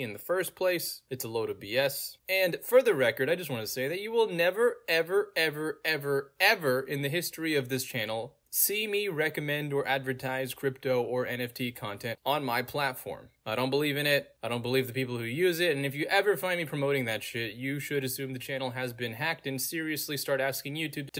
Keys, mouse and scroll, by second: 1.4 click, 2.5 middle click, 2.5-2.9 scroll down 2, 3.2 click, 3.9-5.2 middle drag, 4.0-4.5 scroll down 2, 4.5-5.2 scroll down 1, 6.0 click, 7.5 click, 9.4 middle click, 9.4 scroll down 2, 10.2 click, 13.3 click, 13.7-14.2 scroll down 3, 17.3 click, 17.4 scroll down 2, 17.9 click, 18.5-19.4 scroll down 2, 19.4-19.8 scroll down 1, 20.2 click.